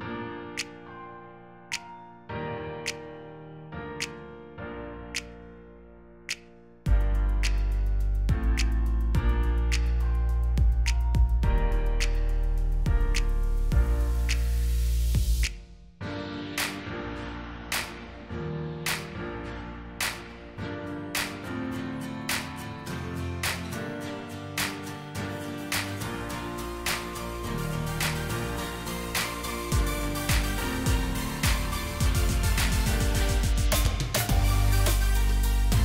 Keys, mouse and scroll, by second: 3.4 alt+shift+click, 4.9 shift+click, 6.6 double click, 8.1 shift+click, 11.7-12.5 alt+scroll down 1, 12.5 alt+scroll up 1, 17.1 double click, 20.4 alt+scroll up 1, 22.3 double click, 23.7 shift+click, 27.6 shift+click, 29.1 ctrl+c, 32.4 typing.